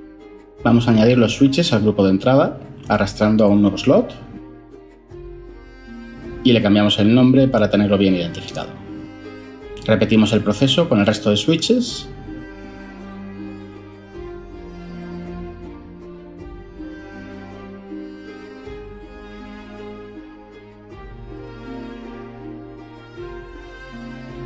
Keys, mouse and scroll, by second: 8.4-9.0 typing, 12.5-13.0 typing, 13.1 Return, 17.7-18.3 typing, 22.9-23.2 typing, 23.3 Return.